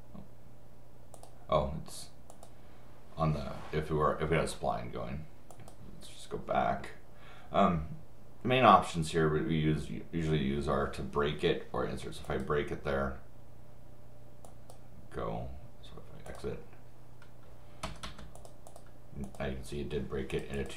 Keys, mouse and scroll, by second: 1.1 click, 2.3 click, 5.5 click, 12.2 click, 14.4 click, 16.3 click, 17.8 Escape, 18.4 click, 18.7 click, 19.2 click, 20.3 click, 20.5 click.